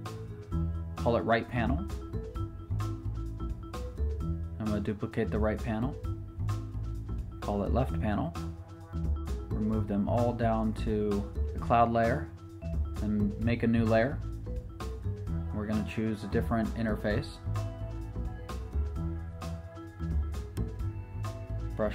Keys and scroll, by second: 0.3-1.8 typing, 7.8 shift+l, 8.3 shift+p, 8.6 Return, 9.3 typing, 11.5 shift+super+n, 11.7 Return.